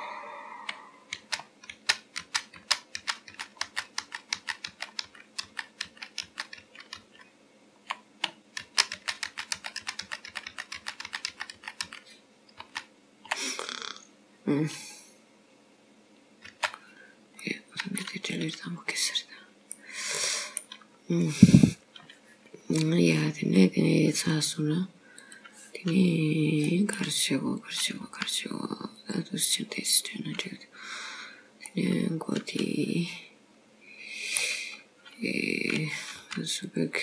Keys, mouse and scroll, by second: 1.2 ctrl+z, 1.8 ctrl+z, 2.3 ctrl+z, 2.7 ctrl+z, 3.1 ctrl+z, 3.4 ctrl+z, 3.8 ctrl+z, 4.1 ctrl+z, 4.4 ctrl+z, 4.8 ctrl+z, 5.1 ctrl+z, 5.5 ctrl+z, 6.0 ctrl+z, 6.3 ctrl+z, 6.7 ctrl+z, 7.1 ctrl+z, 8.7 ctrl+z, 9.0 ctrl+z, 9.4 ctrl+z, 9.6 ctrl+z, 9.9 ctrl+z, 10.1 ctrl+z, 10.4 ctrl+z, 10.6 ctrl+z, 10.9 ctrl+z, 11.1 ctrl+z, 11.5 ctrl+z, 11.7 ctrl+z, 11.9 ctrl+z, 12.7 ctrl+z, 16.6 ctrl+z, 17.5 middle click, 18.4 click, 19.2-19.8 scroll up 2, 19.8 middle click, 21.0 scroll down 1, 25.3 click, 25.9-26.7 scroll down 3, 26.7 middle click, 27.7 click, 28.1 g, 29.5 scroll down 2, 30.6-30.9 scroll down 1, 31.8 middle click, 34.8 scroll up 4, 35.6 click, 36.3 g.